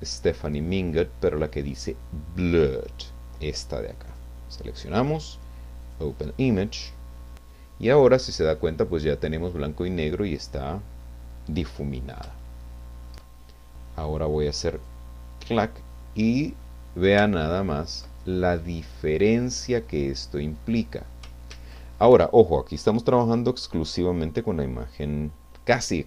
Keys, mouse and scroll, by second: 4.1 click, 5.8 click, 11.6-12.2 scroll up 1, 12.4 shift+middle click, 14.9 click, 16.0 middle click, 17.3 ctrl+middle click, 18.0 ctrl+scroll up 1, 18.6 middle click, 20.1 scroll down 1, 20.6 middle click, 21.8 ctrl+z.